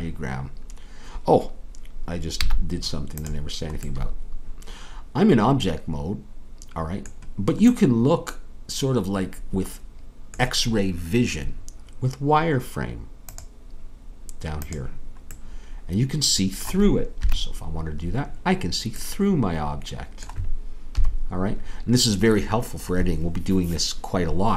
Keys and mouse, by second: 2.4 z, 17.2 KP_3, 19.0 KP_3, 21.0 KP_3.